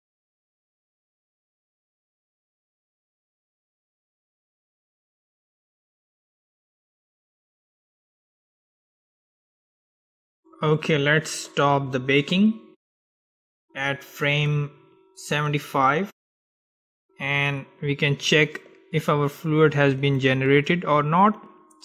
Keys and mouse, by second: 12.4-14.4 drag, 20.8-21.8 drag.